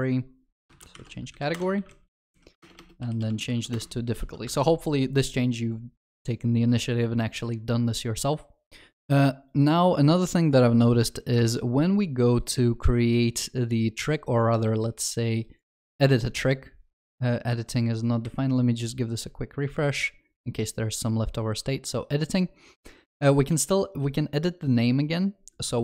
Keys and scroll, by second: 1.5 Return, 3.7 Return, 4.5 ctrl+s.